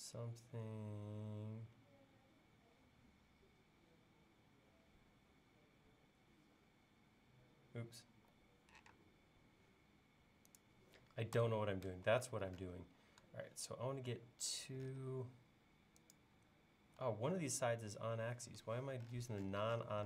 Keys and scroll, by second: 11.4 BackSpace, 13.0 l, 17.0 e.